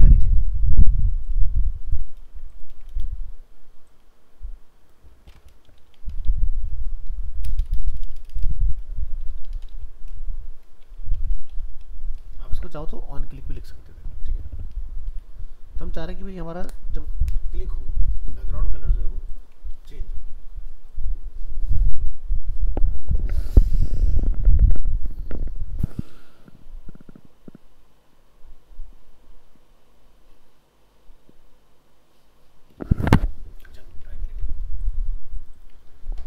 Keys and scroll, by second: 2.3 ctrl+c, 2.8 ctrl+Return, 2.9 ctrl+v, 19.7 ctrl+s.